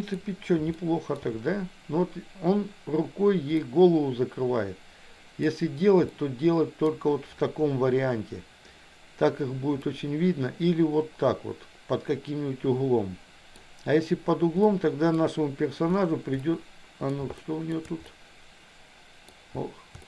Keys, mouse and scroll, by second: 0.8 shift+middle click, 3.6-5.4 middle drag, 6.0 middle click, 9.8-13.7 middle drag, 14.7 middle click, 16.5 middle click, 17.4 shift+middle click, 18.0-19.3 middle drag.